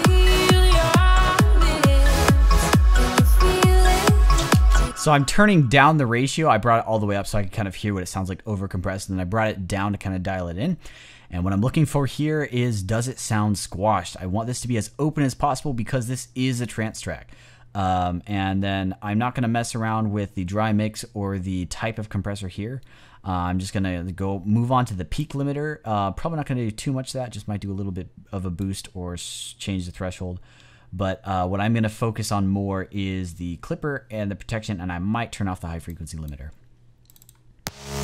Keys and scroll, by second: 4.7 space.